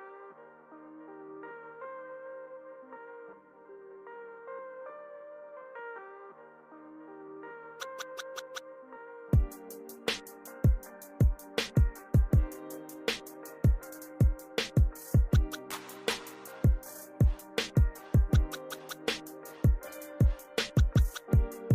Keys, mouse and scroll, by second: 0.0 scroll down 1, 0.8 click, 1.0-1.4 scroll up 2, 2.3 click, 3.3 click, 3.7 scroll down 1, 4.1 click, 5.3 click, 7.7 scroll down 1, 8.1 click, 8.5 scroll up 1, 11.0 click, 12.0 click, 13.6 click, 16.1 click, 16.5 scroll down 1, 16.7 click, 17.2 click, 19.1 click, 20.5 click.